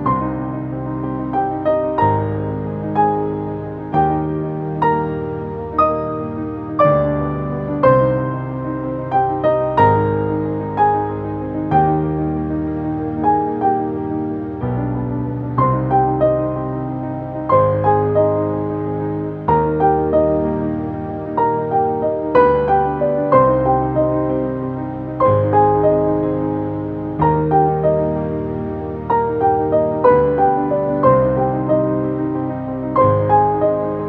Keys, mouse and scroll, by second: 6.5-9.1 drag, 8.0 typing, 9.1 ctrl+space, 9.2 ctrl+click, 9.5 ctrl+space, 9.9-12.4 drag, 12.4 ctrl+x, 14.6 click, 19.4 click, 21.5 Up, 23.7 click, 26.9-27.9 typing, 28.1 click, 28.8 ctrl+space, 30.0-34.0 drag.